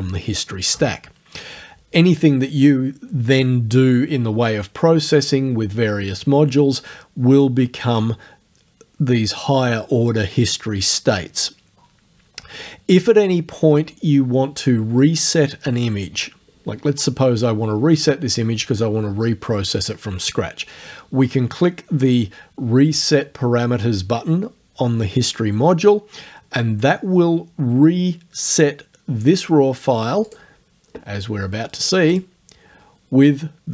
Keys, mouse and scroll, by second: 30.3 click, 32.1 click.